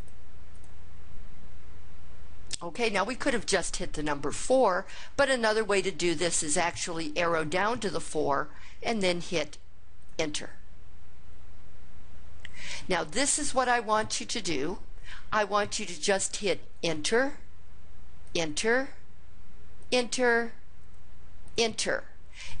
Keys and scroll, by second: 0.4 Down, 9.9 Return, 16.6 Return, 18.1 Return, 19.7 Return, 21.4 Return.